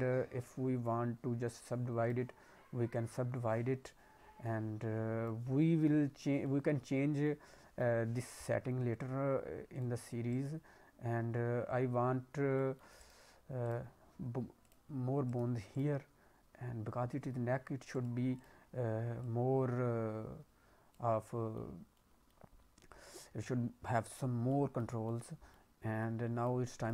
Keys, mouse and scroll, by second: 1.3 scroll down 2, 2.0 click, 2.9 click, 5.4 scroll down 2, 5.6 middle click, 6.0-7.2 scroll up 2, 6.4 middle click, 7.2 middle click, 9.7 click, 10.3 right click, 12.2 scroll up 2, 12.5 middle click, 12.9 right click, 14.5 click, 15.2 right click, 16.4 scroll down 1, 18.3 click, 19.2 click, 21.0 scroll down 2, 21.2 middle click, 21.7 scroll up 1, 21.9 middle click, 24.4 middle click, 25.0 middle click, 25.9 scroll up 1, 26.0 middle click, 26.7 click.